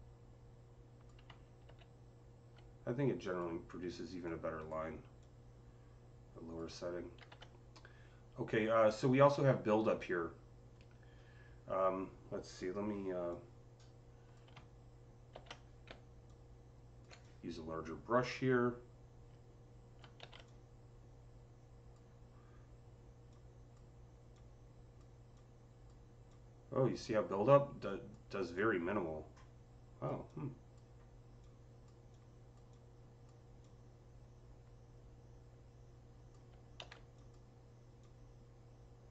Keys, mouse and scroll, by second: 1.5 z, 4.1-9.7 drag, 7.1 ctrl+z, 9.6 typing, 13.1 ctrl+z, 13.1-16.1 drag, 13.1 typing, 15.2 ctrl+z, 15.7-17.0 typing, 16.1 click, 17.1-28.4 drag, 20.1 z, 28.4-37.9 drag, 36.7 ctrl+z, 37.9-39.1 drag.